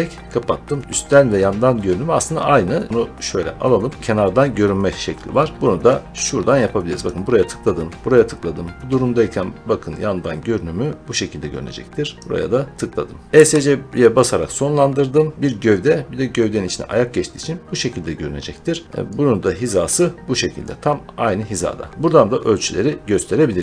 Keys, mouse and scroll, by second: 2.9 middle click, 3.9 click, 4.8 middle click, 6.9 click, 13.3 Escape, 18.3-20.5 middle drag, 20.5 click, 22.7 click.